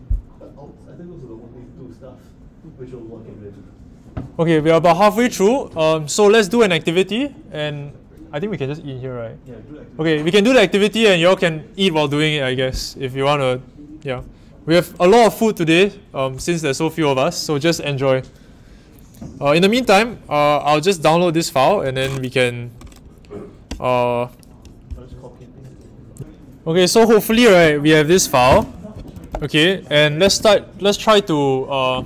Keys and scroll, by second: 27.5-30.7 typing.